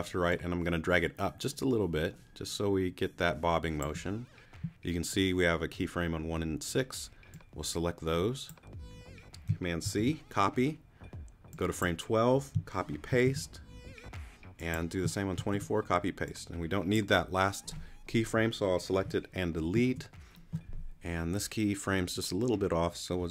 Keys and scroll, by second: 9.8 super+c, 13.3 super+v, 15.4 super+v, 19.7 BackSpace.